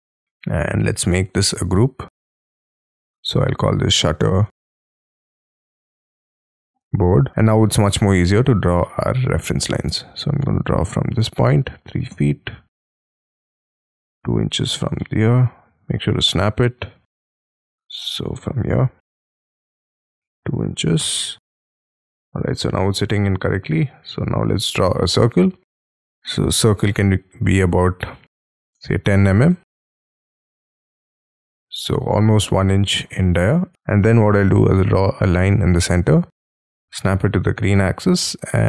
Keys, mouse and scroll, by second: 0.1 double click, 0.8-1.3 scroll down 8, 1.3 scroll up 7, 1.6 g, 3.1 double click, 4.3-7.0 typing, 7.3 middle click, 8.3-8.8 scroll down 6, 9.0 middle click, 9.8-11.5 scroll up 4, 11.5 3, 11.9 ', 12.1 Return, 12.7 middle click, 15.0 middle click, 16.0 Right, 16.3 Left, 17.0-18.3 scroll up 11, 17.4 Escape, 19.3 Right, 20.4 2, 20.8 shift+', 21.0 Return, 21.6 middle click, 22.6 c, 23.9-26.1 scroll up 10, 26.1 ctrl+z, 28.5-29.8 typing, 30.6 middle click, 33.4 c, 33.7 ctrl+z, 34.5 middle click.